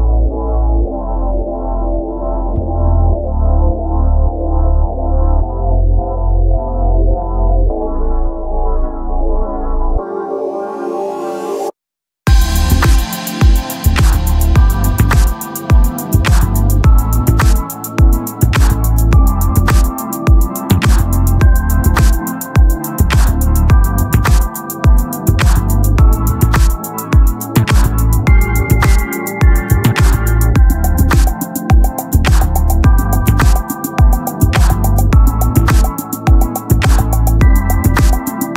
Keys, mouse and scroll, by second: 0.0 z, 2.1 ctrl+z, 4.8 middle click, 5.4 KP_3, 5.8 z, 8.2 click, 14.2-19.1 drag, 22.0-24.8 drag, 26.4 middle click, 27.2 z, 27.3 middle click, 28.1 middle click, 29.0 middle click, 29.3 middle click, 29.5-30.5 middle drag, 30.6 middle click, 31.4-32.8 right drag, 32.8 KP_7, 33.7-35.0 drag, 35.2 middle click, 35.8 middle click, 37.2-38.5 drag.